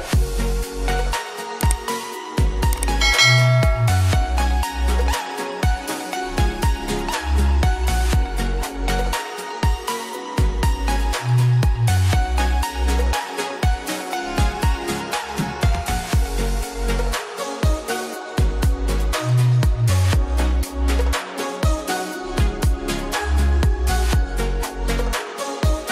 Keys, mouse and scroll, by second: 4.7 click, 8.2-9.3 scroll down 1, 9.3-11.1 scroll up 1, 11.1 click, 15.9 click, 21.5-22.0 scroll up 1, 22.0-22.6 scroll down 1, 23.2-23.7 scroll up 1.